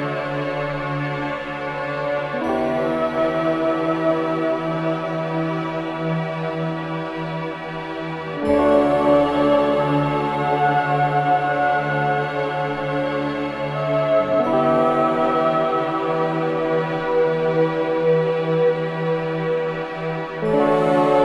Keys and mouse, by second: 0.0 space, 0.8-2.6 drag, 3.5 i, 3.6 click, 4.8-7.1 drag, 6.4 typing, 8.3-8.9 typing, 11.2 click, 12.1 typing, 12.2-13.7 drag, 13.3 typing, 14.4-15.1 typing, 14.7 click, 17.9 space, 18.3-19.1 drag, 18.6 space.